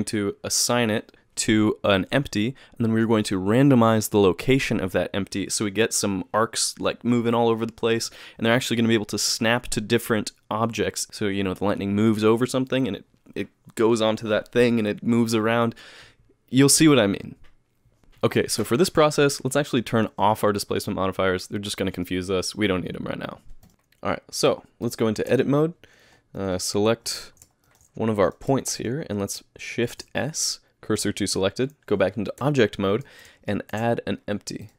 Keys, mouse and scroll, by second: 23.7 click, 23.7 a, 23.7 KP_Decimal, 24.8 click, 25.3 Tab, 26.4 click, 27.0 KP_Decimal, 27.6 shift+middle click, 28.4 click, 28.7 shift+middle click, 29.9 shift+s, 32.4 Tab, 33.7 shift+a.